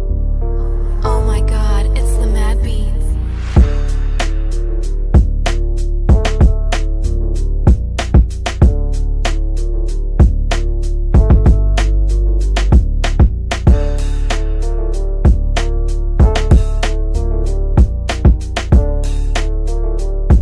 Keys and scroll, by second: 12.2 shift+F2.